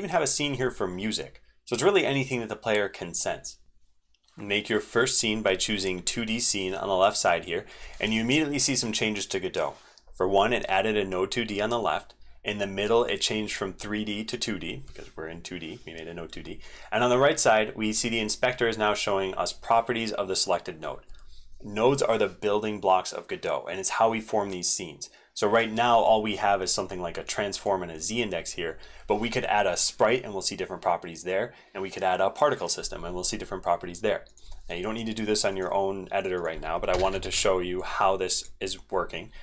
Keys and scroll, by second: 3.8 ctrl+shift+n.